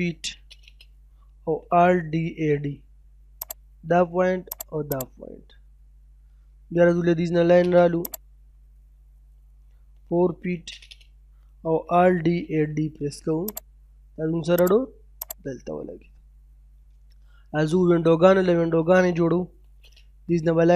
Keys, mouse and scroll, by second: 0.0 space, 1.0-2.5 typing, 3.4 click, 5.2 scroll down 1, 5.4 middle click, 6.8 l, 7.1 space, 8.1 click, 9.4 4, 9.9 space, 11.6-12.6 typing, 13.4 click, 15.6-15.9 scroll down 1, 15.9 middle click, 17.5-17.8 scroll up 1, 17.8 middle click, 19.1 l, 19.3 space, 19.5-20.5 scroll up 1.